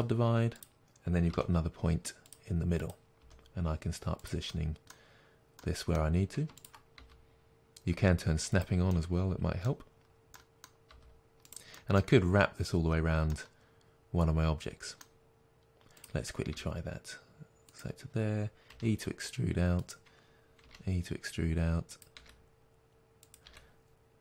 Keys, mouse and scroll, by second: 0.5 click, 1.3 g, 2.3 click, 3.2 g, 4.2 click, 4.4-6.5 middle drag, 6.5 shift+click, 6.9 g, 8.5 click, 8.8-11.4 middle drag, 9.9-10.3 scroll down 2, 11.0 g, 11.5 click, 14.8-15.9 middle drag, 15.9 click, 16.4 g, 17.7 click, 18.7 e, 21.8 e, 21.9 click, 22.1 e, 23.3 click, 23.4 e.